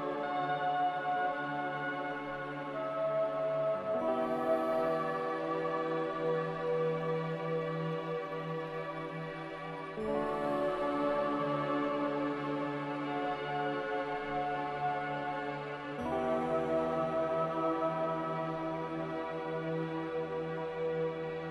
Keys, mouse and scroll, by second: 7.1 a.